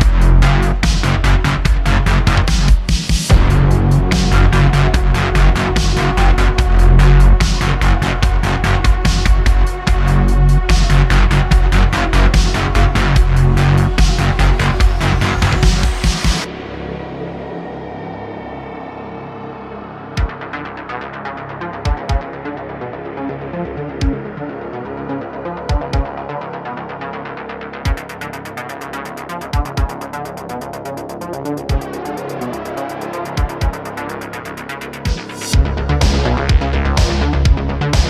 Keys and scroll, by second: 0.2 shift+., 0.6 Tab, 2.5 1, 4.2 g, 6.9 Tab, 15.8 s, 17.0 shift+d, 17.1 x, 21.6 shift+d, 21.8 x, 22.1 x, 26.4 shift+d, 26.5 z, 27.5 s, 34.2 ..